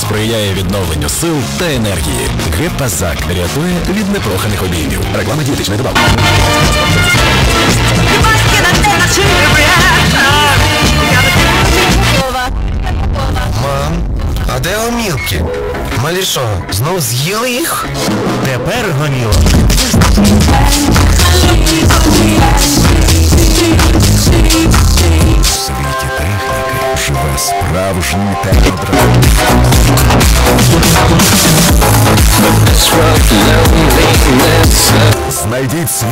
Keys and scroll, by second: 12.9 Page_Down, 25.5 Page_Down, 35.5 Page_Down.